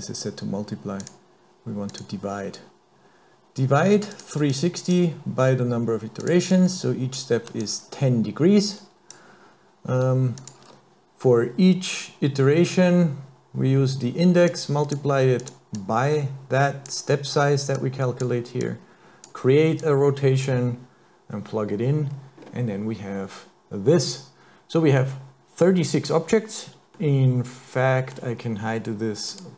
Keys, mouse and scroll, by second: 1.9 click, 4.2 click, 4.5 click, 6.2 click, 6.5 click, 7.6 click, 10.4 click, 10.6 x, 14.5 click, 15.4 click, 15.8 click, 17.8 click, 18.6 click, 19.8 click, 22.1 scroll down 2, 22.4-22.8 scroll up 2, 27.0 middle click, 29.3 click.